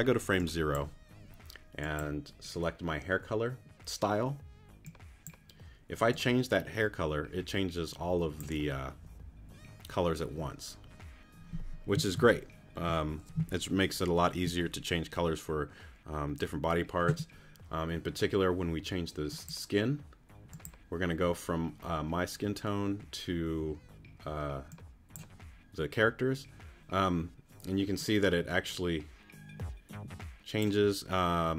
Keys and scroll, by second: 12.1 super+z.